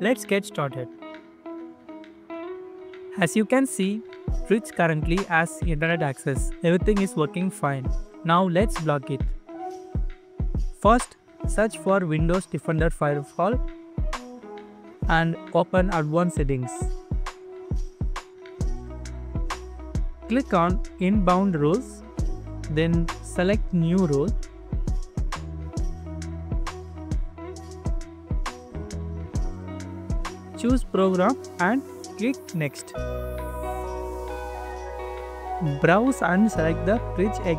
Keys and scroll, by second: 1.3 scroll up 1, 5.0 scroll down 1, 7.4 scroll up 1, 11.8-13.3 typing, 18.7-19.5 typing.